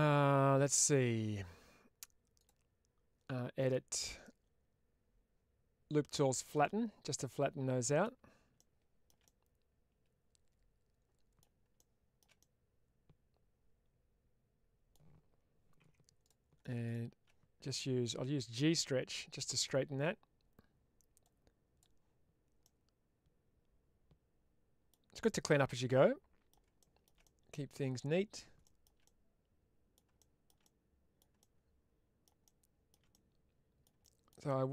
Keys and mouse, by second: 2.2 click, 3.4 click, 6.4 click, 7.2 middle click, 9.2-11.3 middle drag, 12.3-14.8 middle drag, 15.7 2, 16.1 click, 18.6 click, 21.2-21.7 drag, 22.5-24.8 middle drag, 25.1-26.4 middle drag, 27.2-28.2 middle drag, 29.0 middle click, 30.6 middle click, 33.0 middle click, 34.4 middle click.